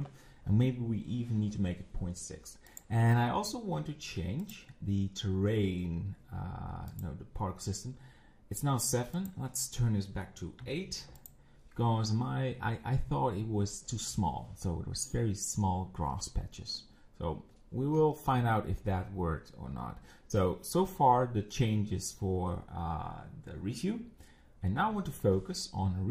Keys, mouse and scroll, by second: 2.7 click, 4.4 click, 6.9 click, 9.2-11.3 drag.